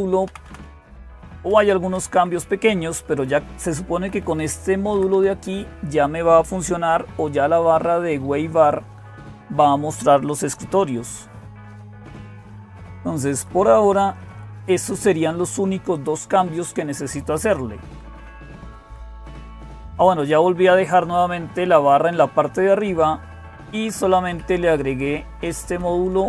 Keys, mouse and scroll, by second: 0.0-26.2 typing, 0.1 Down, 0.3 Down, 1.0 Up, 3.3-3.8 Up, 4.7 Down, 4.9 Down, 6.9 Page_Up, 7.2 Page_Up, 10.8 Page_Up, 11.7 Page_Up, 12.0 Page_Up, 12.2 Page_Up, 12.5 Page_Up, 12.9 Page_Up, 13.0 Page_Up, 13.2 Page_Up, 13.6 Page_Up, 13.8 Page_Up, 14.1 Page_Up, 17.7 Down, 17.9 Down, 18.1 Down, 18.3 Down, 18.5 Down, 19.1 Up, 19.3 Up, 19.5 Up, 19.7 Up, 20.1-21.2 Right, 22.8 Down, 23.5 Down, 23.6 Down, 24.2 Up, 24.7-25.6 Right, 25.9 Right, 26.1 Right.